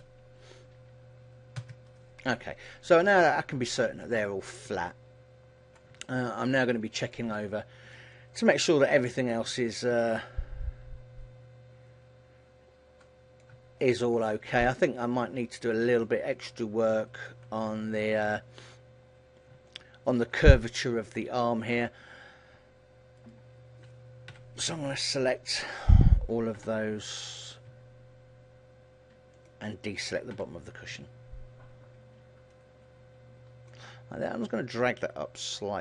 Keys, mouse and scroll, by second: 3.2 middle click, 4.3-4.8 scroll down 4, 4.8 middle click, 6.0 Tab, 6.5 middle click, 7.5 shift+middle click, 8.3 middle click, 9.8 Tab, 10.1 middle click, 14.0 shift+middle click, 14.4 middle click, 16.2 shift+middle click, 16.8 middle click, 18.0 KP_1, 19.1-19.8 scroll up 6, 19.8 shift+middle click, 21.8-23.3 scroll down 1, 23.3 right click, 23.3 scroll down 3, 24.4 ctrl+l, 25.3-26.2 scroll down 3, 26.8 b, 29.4 click, 30.4 b, 35.4 click.